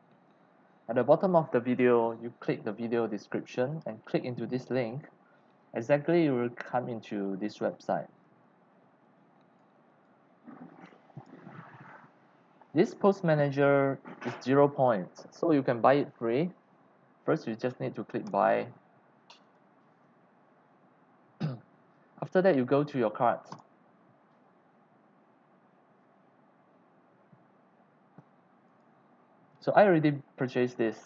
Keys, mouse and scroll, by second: 4.0-6.3 drag, 9.0 click, 9.9 click, 10.7 click, 11.1 click, 12.1 click, 12.2 scroll down 1, 12.7-13.0 scroll up 1, 14.4 click, 15.2 click, 15.9 click, 18.2 click, 19.4 click, 23.5 click, 28.6 click.